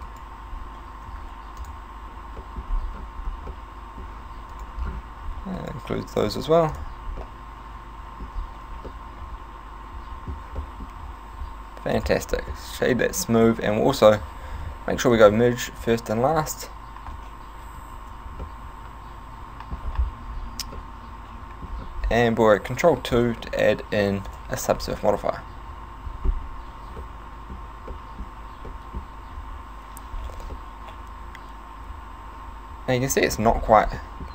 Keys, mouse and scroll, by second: 0.1 alt+shift+right click, 1.1 x, 2.4 middle click, 2.7-3.5 scroll up 6, 3.5 middle click, 4.5 alt+right click, 4.8 scroll down 4, 5.6 alt+shift+right click, 6.3 x, 7.2 middle click, 8.4 scroll down 3, 9.0 middle click, 9.8 middle click, 10.8 middle click, 11.0 a, 11.4 w, 12.6 middle click, 15.2 click, 15.8 click, 17.8 ctrl+n, 18.5 middle click, 19.5 middle click, 19.9-20.5 scroll up 7, 20.8 middle click, 21.8-22.3 scroll down 5, 22.7 ctrl+2, 24.3 click, 25.0 middle click, 27.0 middle click, 27.9 shift+middle click, 28.7 middle click, 29.4 a, 30.5 middle click, 33.5 scroll up 5, 34.0 middle click.